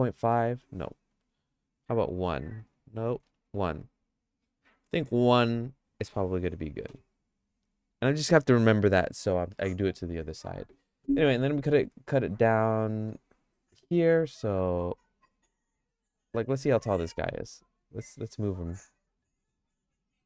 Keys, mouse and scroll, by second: 12.0 ctrl+r.